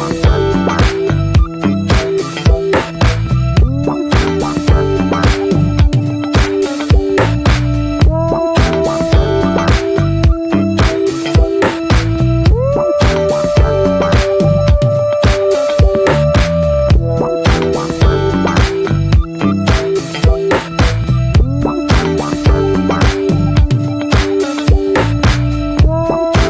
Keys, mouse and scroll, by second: 0.1 ctrl+z, 0.6 click, 0.7-2.5 scroll up 3, 0.9 shift+middle click, 1.2 shift+middle click, 3.2 click, 3.4-3.8 scroll down 5, 3.8 shift+middle click, 3.9-5.7 scroll up 4, 4.0 ctrl+z, 4.3 shift+middle click, 5.7 scroll up 1, 5.9-7.6 shift+middle drag, 7.6-11.2 drag, 11.2 ctrl+z, 12.3 click, 12.5-13.2 scroll down 3, 12.6 middle click, 13.3 scroll up 3, 13.6 ctrl+z, 15.9 click, 16.1-16.9 scroll down 7, 16.3 middle click, 16.9 middle click, 17.0-18.1 scroll up 8, 17.2 shift+middle click, 17.4 middle click, 17.7 shift+middle click, 18.1-20.9 shift+middle drag, 20.9 click, 21.2 middle click, 21.8 scroll down 4, 22.1 shift+middle click, 22.4 scroll up 1, 22.6-23.9 shift+middle drag, 23.9 click, 24.1 scroll down 7, 24.4 middle click, 24.9 scroll down 1, 25.0 shift+middle click, 25.1 scroll up 1, 25.3 alt+middle click, 25.6 shift+middle click, 26.2 scroll up 1.